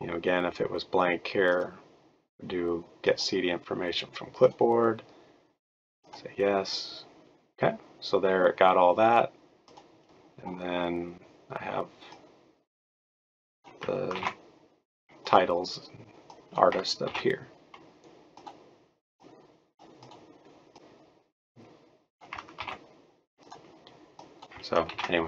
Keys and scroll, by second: 14.1 ctrl+c, 17.1 ctrl+v, 22.5 ctrl+c, 24.9 ctrl+v.